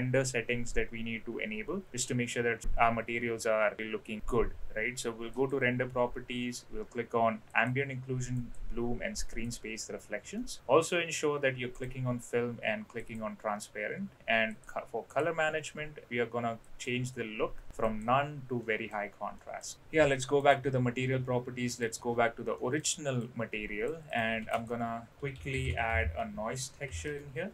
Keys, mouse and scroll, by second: 5.4 click, 7.5 click, 8.4 click, 9.1 click, 10.4 middle drag, 13.0 click, 14.4 click, 15.1 drag, 16.6-18.1 drag, 18.6 middle drag, 19.4 middle drag, 20.4 click, 21.8 click, 22.6 middle click, 23.2 click, 24.1 click, 24.5 shift+a.